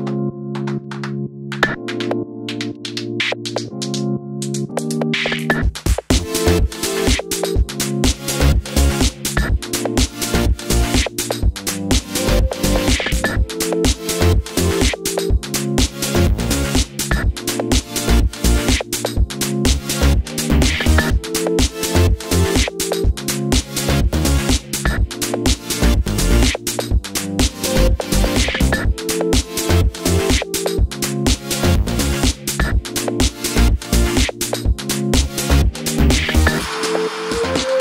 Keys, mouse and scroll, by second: 11.3 middle click, 11.3 3, 11.6 click, 12.1 g, 19.5-25.0 middle drag, 25.8 o, 31.3 click, 31.8 Tab, 31.8-32.6 middle drag, 32.6 Tab, 33.3 l, 34.7 o.